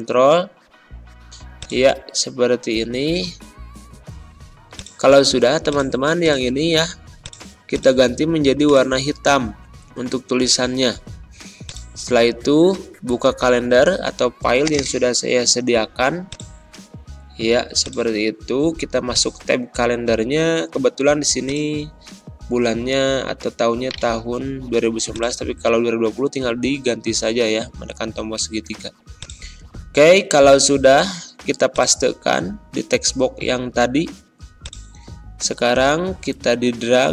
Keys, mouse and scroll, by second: 2.4 ctrl+a, 4.6 click, 9.0-9.4 ctrl+scroll up 1, 11.5 click, 14.6 click, 21.4-23.8 drag, 23.8 right click, 25.0 click, 26.4 alt+Tab, 28.2 alt+Tab, 29.1 click, 29.5 ctrl+a, 30.2 ctrl+v, 31.6-37.1 drag.